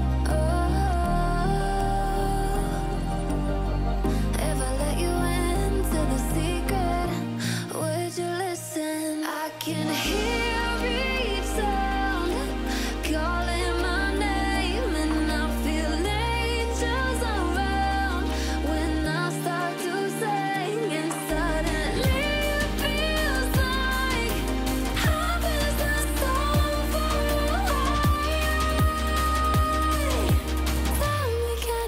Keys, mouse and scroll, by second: 4.5 click, 5.1-6.5 drag, 14.0 click, 20.2-20.6 drag, 21.8-22.3 alt+scroll down 2, 22.3 click, 22.8-23.2 alt+scroll down 1, 23.8 alt+scroll up 1, 24.0-24.3 alt+scroll down 1, 24.5-25.2 click, 25.4 Delete, 25.9 click, 27.3-27.7 alt+scroll up 1, 27.9 click, 28.7 click, 29.9-31.3 drag, 31.7-31.8 scroll down 1.